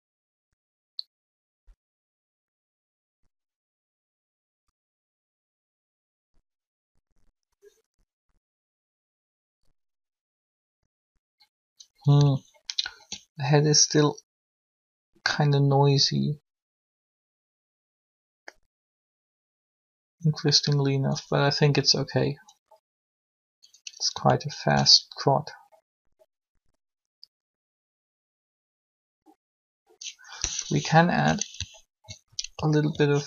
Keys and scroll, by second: 30.6 3.